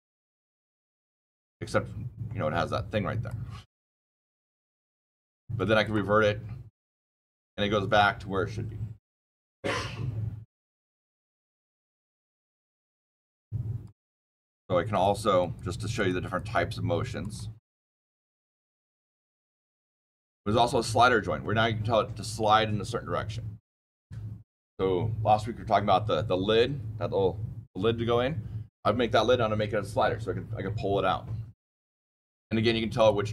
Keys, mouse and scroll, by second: 3.2 click, 5.8 click, 13.7 click, 14.8 click, 15.3 click, 15.9 click, 16.2 click, 17.1 click, 18.3 click, 18.9 click, 19.4 click, 20.5 click, 32.9 click.